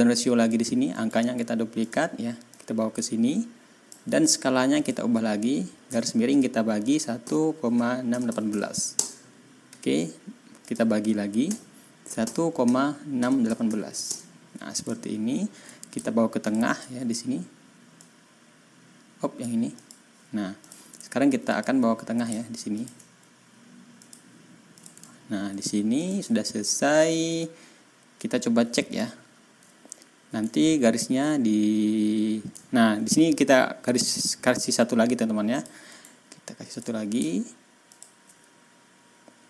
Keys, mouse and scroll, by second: 0.9 right click, 1.7 click, 2.4-4.0 drag, 4.7 click, 5.8 KP_Divide, 7.1-8.4 typing, 8.9 Return, 10.6 click, 11.4 KP_Divide, 12.2-13.6 typing, 14.0 Return, 15.3 ctrl+scroll up 2, 16.4 shift+middle click, 17.9-19.5 drag, 19.7 click, 20.0-20.6 scroll up 1, 20.6 click, 21.0 ctrl+scroll up 2, 21.4 ctrl+click, 22.7 shift+middle click, 23.9 middle click, 24.7 middle click, 25.0-25.4 ctrl+scroll down 2, 25.9 click, 27.1 ctrl+scroll up 2, 27.7 ctrl+scroll down 1, 28.2 ctrl+scroll up 2, 29.1 ctrl+scroll down 2, 32.6 ctrl+scroll up 2, 35.5 click, 35.8 right click, 36.6 click, 37.8 shift+click.